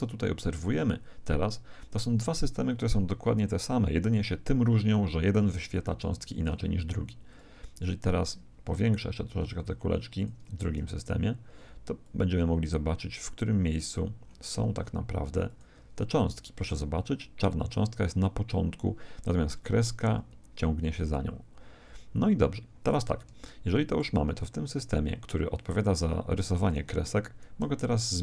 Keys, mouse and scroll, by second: 5.8-8.1 middle drag, 7.2 click, 9.0-13.2 middle drag, 10.2-13.8 drag, 14.2-15.4 middle drag, 15.4 click, 22.7-25.2 middle drag, 27.2-28.2 middle drag.